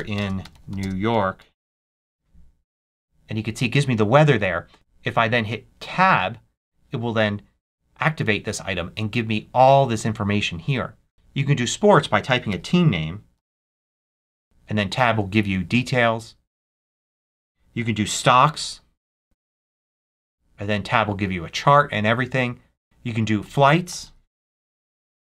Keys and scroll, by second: 0.0-2.0 typing, 4.7 k, 5.7 Tab, 11.1 BackSpace, 12.4-14.6 typing, 17.1 super+a, 18.0-19.4 typing, 19.8 Tab, 23.3 super+a, 23.7-25.2 typing.